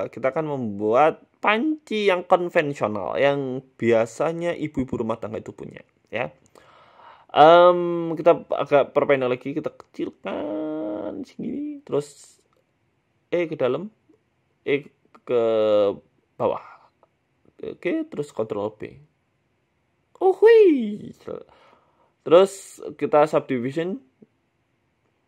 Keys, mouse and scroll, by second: 0.7 scroll up 4, 0.9 shift+middle click, 1.1 scroll down 6, 1.3 s, 1.9 scroll up 2, 2.1 shift+middle click, 2.3 Tab, 3.0 click, 4.2 s, 4.9 Tab, 5.4 a, 5.8 right click, 5.9 right click, 6.1 s, 6.9 Tab, 7.3 click, 8.3 g, 9.1 s, 10.6 g, 11.6 s, 13.1 e, 13.5 s, 15.1 e, 16.0 s, 16.9 g, 18.0 scroll up 3, 18.6 ctrl+b, 20.3 Tab, 21.3 click, 23.2 middle click, 23.5 Tab, 23.7 middle click, 24.1 ctrl+r.